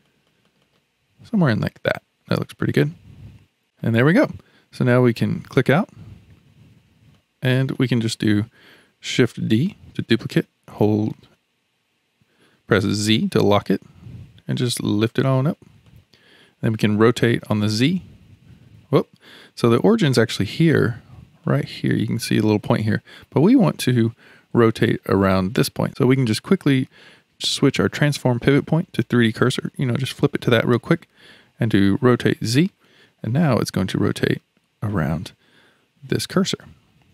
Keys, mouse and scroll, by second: 3.6-4.8 middle drag, 4.8 click, 6.4 Tab, 7.1-9.3 middle drag, 9.3 shift+d, 16.9 r, 21.4-25.9 middle drag, 28.1-31.1 drag, 32.0 r, 36.6-37.1 middle drag.